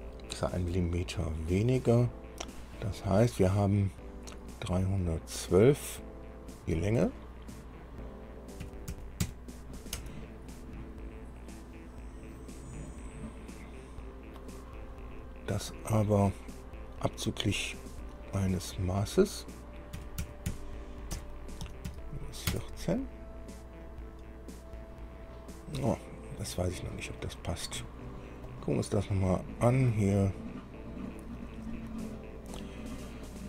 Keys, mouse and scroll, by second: 6.8 click, 8.9 KP_3, 9.2 KP_1, 10.2 Tab, 12.6-14.8 drag, 18.1 click, 20.2 KP_3, 20.7 KP_1, 20.7 KP_2, 21.4 KP_Subtract, 22.1 KP_1, 22.1 KP_4, 27.4 click, 28.7 click, 30.6 click, 32.2 click.